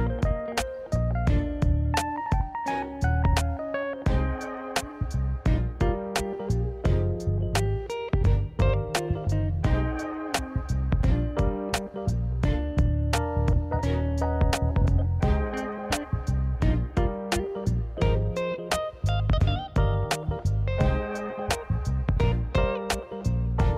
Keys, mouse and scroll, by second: 2.1 ctrl+s, 3.3 ctrl+a, 4.0 middle click, 4.3 Tab, 4.3 `, 5.1 middle click, 5.5-5.9 scroll up 3, 5.9 middle click, 6.3-6.7 scroll down 1, 6.7 middle click, 8.7 f, 9.8 middle click, 10.8-12.5 right drag, 13.2 middle click, 14.1 Tab, 14.4 middle drag, 14.8 Tab, 15.1 click, 15.8 click, 16.1 middle click, 17.0 middle click, 17.7 e, 22.4 Tab.